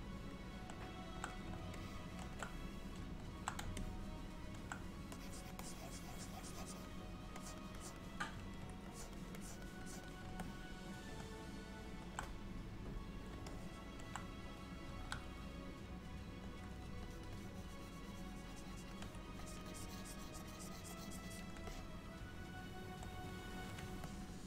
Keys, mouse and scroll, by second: 1.8 shift+middle click, 3.9 middle click, 5.2 click, 5.7 click, 7.5 click, 7.9 click, 9.0 click, 9.5 click, 9.9 click, 10.5 middle click, 13.6 middle click, 17.1 ctrl+click, 17.4 ctrl+click, 19.5 click, 19.7 click, 20.3 click, 20.5 ctrl+click, 21.7 middle click, 24.1 shift+middle click.